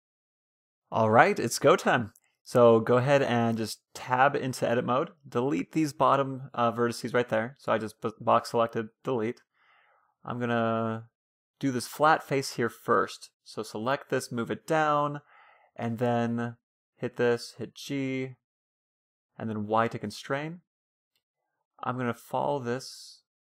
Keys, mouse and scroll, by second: 1.3-2.8 right drag, 1.5 Tab, 1.9-3.6 middle drag, 3.9 Tab, 5.5 a, 5.9 b, 6.9 Delete, 8.6 a, 9.2 a, 9.3-11.2 middle drag, 11.6-13.6 middle drag, 12.2 a, 13.0 g, 14.5-17.0 middle drag, 15.5 a, 15.9 b, 16.5 g, 19.8-22.2 middle drag, 21.1 e, 23.1 ctrl+z.